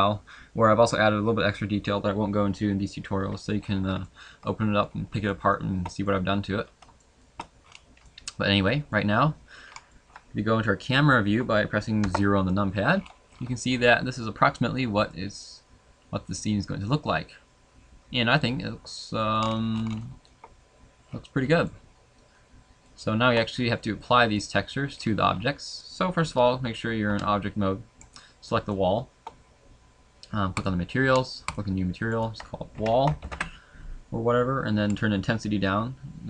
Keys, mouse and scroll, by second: 4.0 middle click, 5.3 shift+middle click, 6.2 middle click, 7.0 shift+middle click, 7.6 scroll up 2, 8.0 middle click, 9.6 scroll up 2, 9.8 middle click, 12.0 KP_0, 12.9-13.9 scroll down 9, 15.1 shift+middle click, 19.4-19.9 scroll up 4, 20.0 shift+middle click, 20.4 scroll up 1, 21.1-21.4 scroll down 1, 21.7 shift+middle click, 21.7 scroll down 3, 23.5-24.2 scroll down 3, 24.4 middle click, 25.0-25.4 scroll down 3, 25.8 middle click, 27.1 Tab, 28.0 right click, 28.7 shift+middle click, 31.6 click, 31.6-32.8 scroll up 4, 33.3 click, 34.9 click.